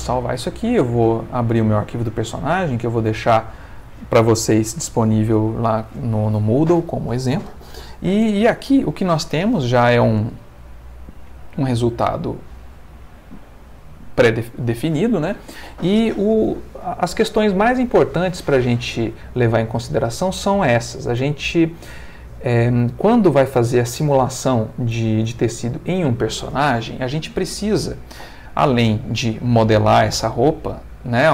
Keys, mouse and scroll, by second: 1.1 click, 2.9 click, 10.1 space, 27.9 Escape, 29.3-31.3 middle drag.